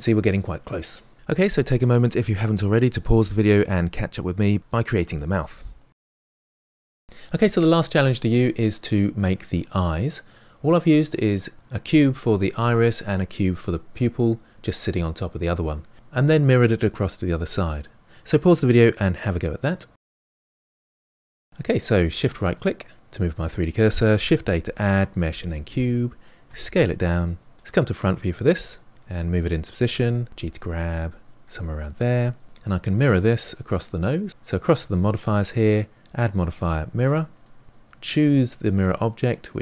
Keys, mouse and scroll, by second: 21.5-22.5 middle drag, 22.5 shift+right click, 24.3 shift+a, 26.4 s, 28.0 KP_1, 28.6-28.9 scroll up 2, 28.9-30.3 shift+middle drag, 30.3 g, 34.3 click, 37.4 click, 39.3 click.